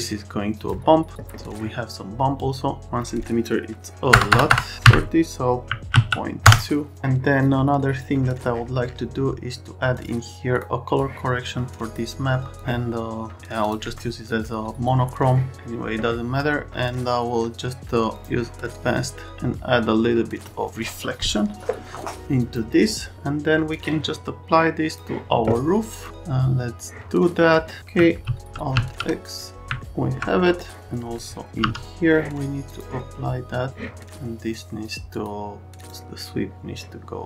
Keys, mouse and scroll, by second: 4.1 BackSpace, 4.3 BackSpace, 4.5 BackSpace, 4.8 Delete, 5.6 KP_Decimal, 5.9 KP_2, 6.4 KP_Enter, 9.9 click, 10.5 click, 10.9 click, 12.5 click, 13.6 click, 18.1 click, 19.3 click, 22.4 click, 28.2 alt+x, 28.7 alt+x, 31.6 m.